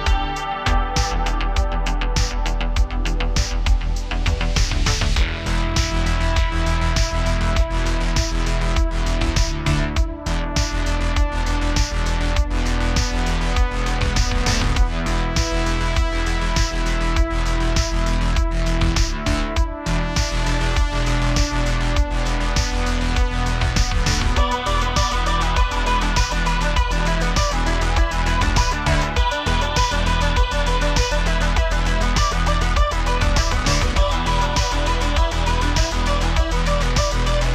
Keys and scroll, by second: 6.5-9.3 typing, 10.3-11.4 typing, 12.8-14.6 typing, 16.5-17.2 typing, 19.8 x, 24.0-27.0 typing, 31.8 super+z, 34.0 space, 35.7 space, 36.9 BackSpace.